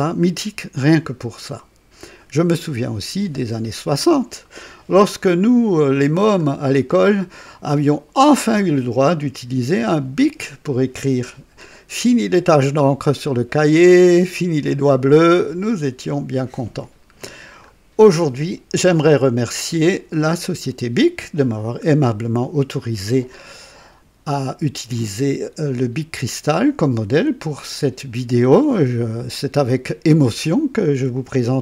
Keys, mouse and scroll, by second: 5.1-6.0 drag, 6.4 scroll up 2, 17.1-17.6 scroll down 2, 24.9-29.3 drag.